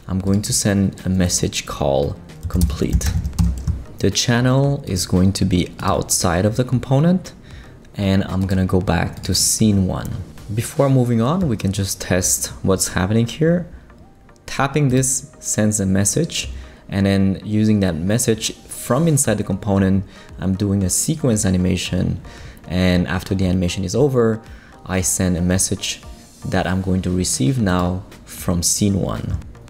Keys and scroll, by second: 2.2-3.6 typing.